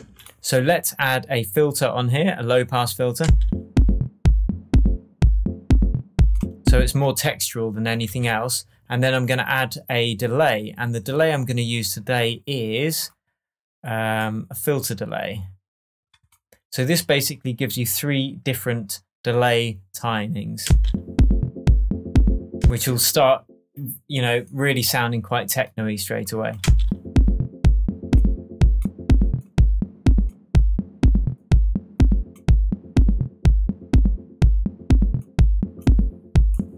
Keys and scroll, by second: 3.2 space, 7.0 space, 8.0 Left, 20.6 space, 22.6 space, 26.6 space.